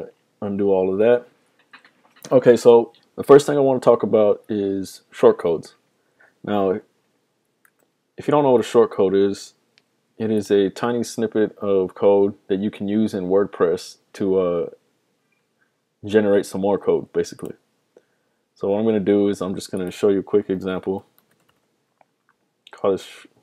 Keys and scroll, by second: 7.7 super+Tab, 20.3-22.0 typing.